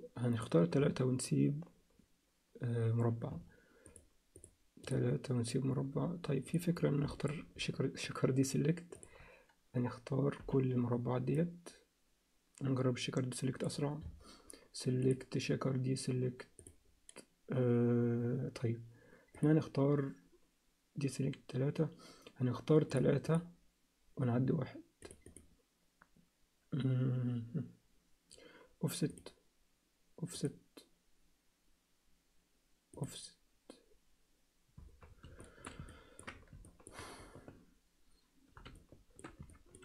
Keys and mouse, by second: 3.8 shift+click, 4.3 shift+click, 4.8 shift+click, 7.1 alt+shift+middle click, 10.4 b, 15.1-16.7 drag, 22.9 click, 23.3 click, 25.1 click, 25.4 click, 29.1 click, 32.9 click, 35.4 alt+shift+middle click, 35.9 ctrl+alt+middle click, 36.6 shift+middle click, 38.7 alt+shift+middle click, 39.5 ctrl+alt+middle click.